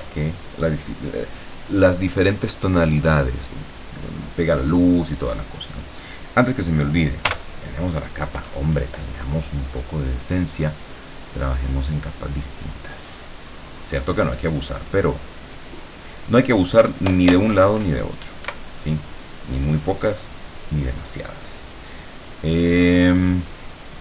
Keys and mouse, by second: 7.4 l, 11.7 click, 12.5 click, 14.6 click, 15.5 click, 15.9 right click, 18.5 Escape.